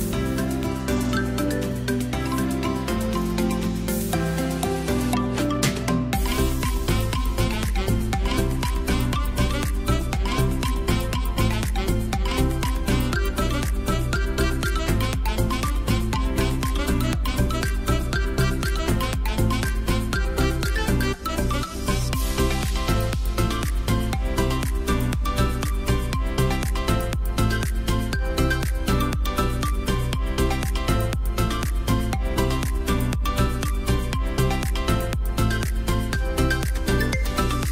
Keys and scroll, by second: 0.2 Escape, 2.0 o, 2.0 p, 5.9 space, 10.5 space, 15.0 space, 17.3 space, 20.8 alt+space, 23.4 ctrl+alt+space, 26.0 space, 26.7 t, 27.7-32.1 typing, 32.4 Escape, 35.1 space, 36.1 space, 37.4 i.